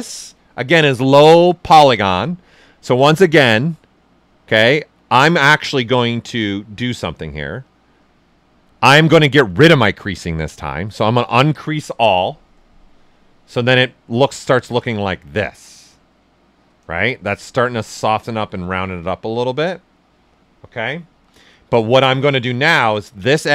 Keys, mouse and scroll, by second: 12.3 shift+click, 13.8-17.0 shift+right drag, 17.0 shift+f, 17.4 ctrl+right click, 18.0 right click, 19.0 alt+right click, 19.1 ctrl+alt+right click, 21.0 shift+right click, 21.0 f, 21.6 right click.